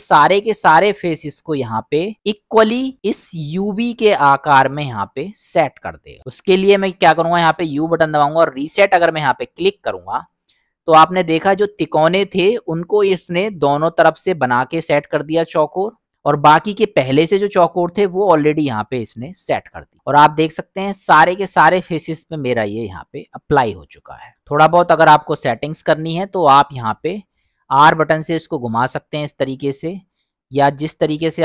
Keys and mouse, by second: 7.3 u, 10.8 middle click, 21.4 middle click, 22.1 middle click, 23.1-24.3 middle drag, 25.2-26.1 drag, 27.8 r, 31.2 s.